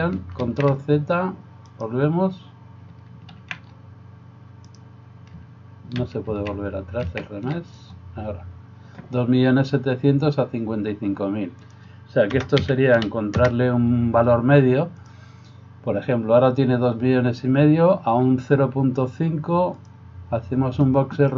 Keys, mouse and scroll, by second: 0.5 ctrl+z, 1.7 middle click, 1.7 right click, 3.5 ctrl+z, 4.6 right click, 6.1 ctrl+x, 6.3 ctrl+z, 7.6 ctrl+z, 11.6-15.1 drag, 20.1-21.3 drag.